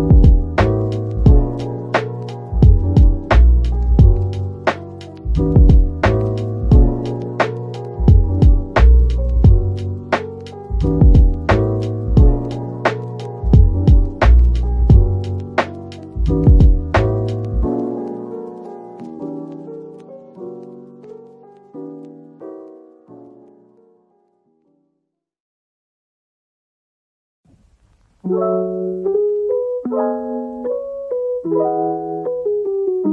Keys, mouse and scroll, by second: 3.1-3.8 typing, 6.5 right click, 6.8-7.6 typing, 15.7 typing, 16.7 typing, 19.9-20.3 typing, 29.9 typing, 32.7 scroll up 1.